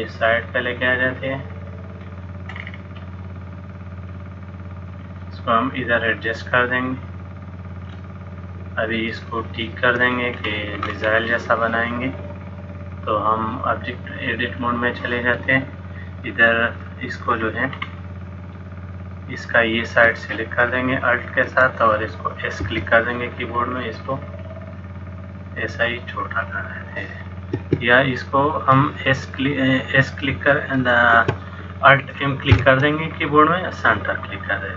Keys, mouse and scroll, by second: 0.8 click, 2.6-3.3 scroll down 3, 3.8-4.1 scroll down 1, 4.1 click, 6.0 click, 9.4 shift+middle click, 10.1-10.5 scroll down 2, 10.5-12.4 scroll up 4, 12.4-13.2 scroll up 2, 13.5 click, 17.5-17.8 scroll down 1, 17.8-18.8 scroll up 1, 19.6 click, 19.6-20.2 scroll up 1, 21.1 alt+click, 22.7 s, 30.4 s, 32.6 alt+m.